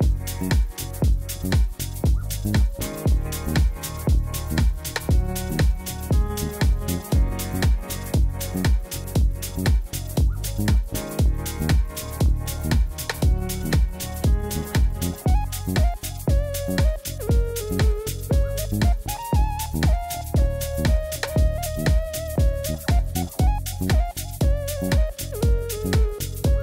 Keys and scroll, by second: 0.9 g, 2.9 g, 3.1 z, 3.6 g, 4.3 r, 6.8 3, 7.2 g, 9.9 e, 10.3 s, 10.8 e, 12.3 e, 14.1 Tab, 21.0 ctrl+z, 21.5 ., 21.6 1, 21.7 Return.